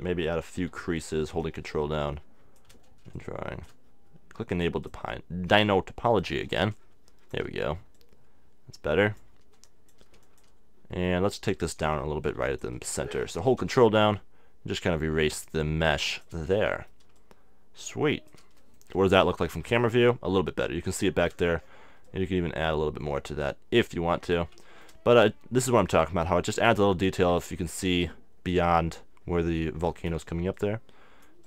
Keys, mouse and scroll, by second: 0.6 f, 5.5-8.5 drag, 9.7-11.9 drag, 11.1 middle click, 12.5 f, 12.6-15.5 drag, 17.2-18.7 drag, 19.0 middle click, 19.1 KP_0, 22.1-24.0 drag, 22.1-24.7 middle drag, 25.3-27.0 drag, 25.3-26.4 middle drag, 27.5-30.5 middle drag, 30.5-31.4 drag.